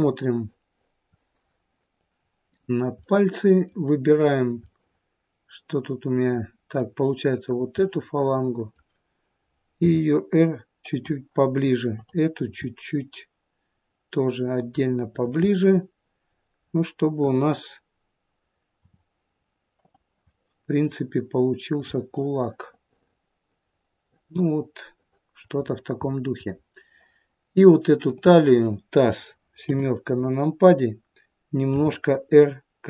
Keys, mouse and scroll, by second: 2.4 click, 3.0 middle click, 4.6 middle click, 7.2 click, 7.8 middle click, 9.8 r, 11.9 click, 12.4 r, 15.4 middle click, 17.2 click, 18.7 r, 21.7 middle click, 21.7 click, 22.2 middle click, 25.5-28.0 scroll down 5, 28.0 click, 28.0-28.9 scroll down 3, 29.6 KP_7, 31.7 r.